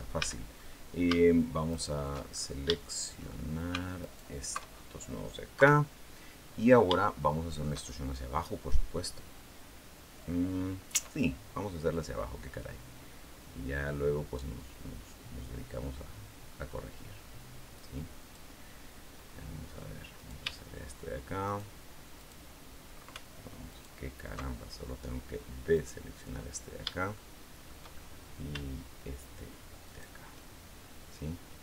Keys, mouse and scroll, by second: 0.0 a, 0.4 scroll up 1, 1.5 alt+shift+right click, 2.1-2.5 alt+shift+scroll up 1, 2.5 shift+middle click, 3.8 alt+shift+right click, 4.5 alt+shift+scroll down 1, 5.4 KP_3, 6.4-7.1 scroll up 5, 6.8 shift+middle click, 10.7 e, 18.0 click, 20.0 shift+right click, 21.2 shift+right click, 22.0 shift+right click, 23.5 alt+shift+right click, 25.5 shift+right click, 26.3-26.7 scroll down 2, 27.0 shift+middle click, 27.7-28.2 shift+scroll up 3, 29.6 shift+right click, 30.4-30.8 shift+scroll down 3.